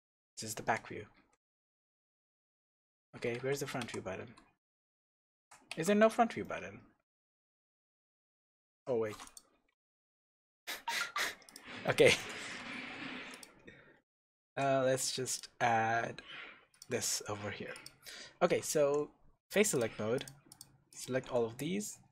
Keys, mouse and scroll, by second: 0.5 KP_6, 1.1 KP_9, 2.1 KP_8, 3.2 KP_1, 3.3 KP_2, 4.2 KP_1, 4.7 KP_3, 6.4 middle click, 8.0-9.2 middle drag, 8.7 KP_3, 9.2 click, 9.7 h, 10.1 scroll up 1, 11.4 click, 11.8-13.3 shift+middle drag, 12.4 Tab, 12.8-13.3 scroll up 2, 13.3 click, 14.0 scroll down 2, 14.4 ctrl+r, 16.8 click, 16.9 scroll down 1, 17.0-17.7 scroll up 1, 17.7 click, 18.8 3, 19.7 click, 20.1 shift+click, 20.5 shift+click, 20.9 shift+click.